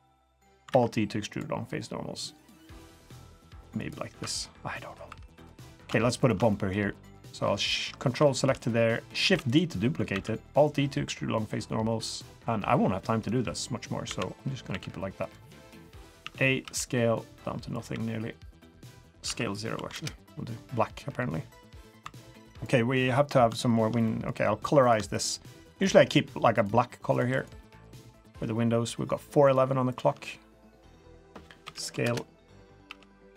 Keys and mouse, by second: 0.7 alt+e, 4.1 3, 4.4 4, 4.7 middle click, 5.0 3, 5.6 middle click, 6.2 ctrl+shift+click, 6.5 middle click, 7.0 click, 8.2 shift+click, 9.2 shift+d, 10.1 alt+e, 14.0 l, 14.7 g, 16.2 a, 16.6 s, 17.9 g, 19.2 s, 21.5 middle drag, 22.0 3, 24.0 middle drag, 24.8 click, 25.1 shift+click, 25.6 shift+click, 25.8 shift+click, 26.5 shift+click, 27.1 shift+click, 27.3 shift+click, 27.8 shift+click, 29.4 shift+click, 29.9 shift+click, 31.6 s, 32.8 g.